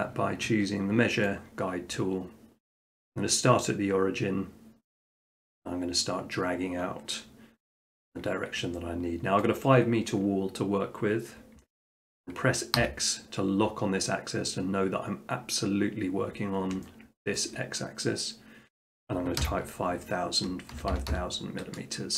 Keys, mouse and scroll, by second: 1.3 click, 4.9 click, 8.6 click, 9.4 shift+middle click, 12.8 x, 14.7-17.3 middle drag, 17.3 scroll, 19.4 5, 20.8 0, 20.9 0, 21.1 0.